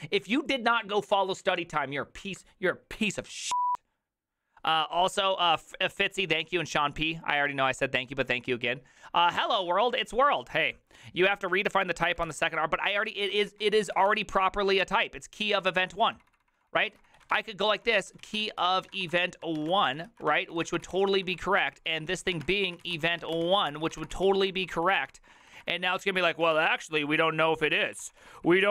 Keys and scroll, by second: 12.3 alt+f, 12.3 alt+{, 13.0 ctrl+c, 13.3-28.7 typing, 14.8 ctrl+c.